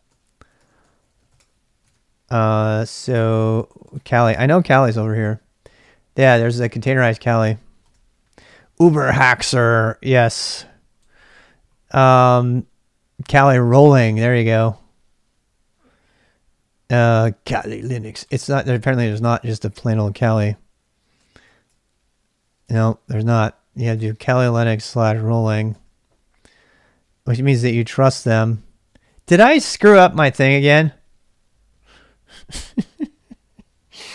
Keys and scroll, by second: 0.0-2.3 typing, 4.5-7.0 typing, 7.8 Return, 19.4 ctrl+[, 19.7 k, 20.3 k, 21.2 shift+a, 22.5 x, 22.6 Return, 23.8-26.5 typing, 28.7-29.4 typing.